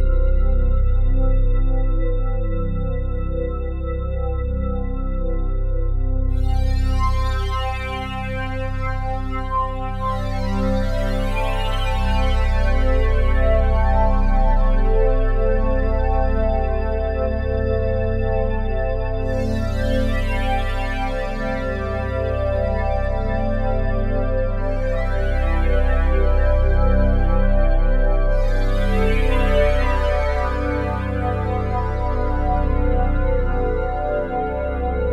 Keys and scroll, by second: 0.4 ctrl+z, 4.5 ctrl+z.